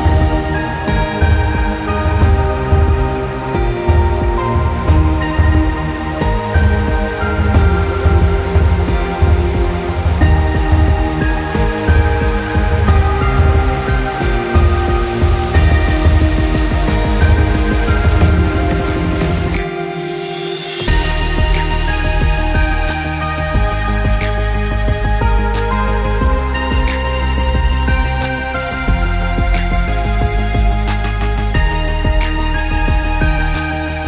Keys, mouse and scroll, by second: 2.3 space, 2.4 click, 2.7 space, 3.0 click, 3.8 Delete, 4.3 click, 4.9 alt+scroll down 1, 5.8 click, 6.9-7.2 alt+scroll up 1, 7.6 click, 12.8-13.2 alt+scroll down 2, 13.2 space, 13.3 click, 13.6 space, 14.1 click, 32.8 click.